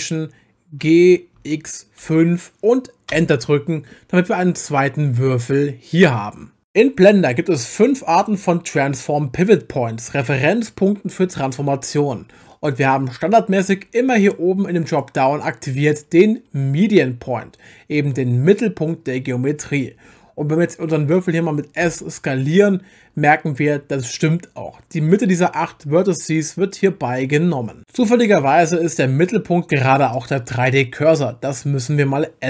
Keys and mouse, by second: 0.8 g, 1.4 x, 2.0 5, 3.1 Return, 14.9-19.6 drag, 21.8 s.